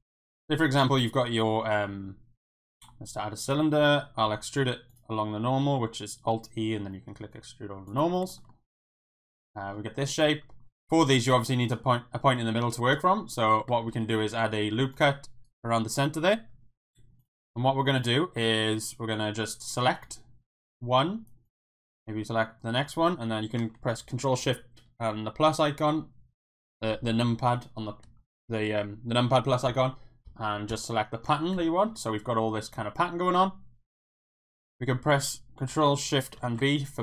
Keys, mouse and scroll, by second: 0.0 Tab, 0.0 x, 0.2 shift+a, 3.1 Tab, 3.5 a, 4.2 alt+e, 8.3 scroll up 1, 8.5 click, 8.5 right click, 8.8 middle click, 9.4 scroll up 1, 9.6 click, 9.6 right click, 13.9 ctrl+r, 17.2 click, 18.0 click, 25.2 ctrl+shift+KP_Subtract, 36.3 ctrl+shift+b.